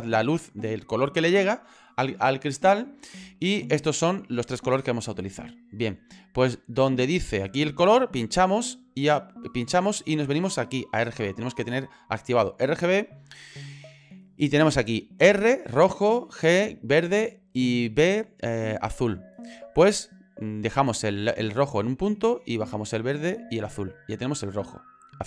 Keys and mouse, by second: 8.3 click, 9.3 click, 25.0 click.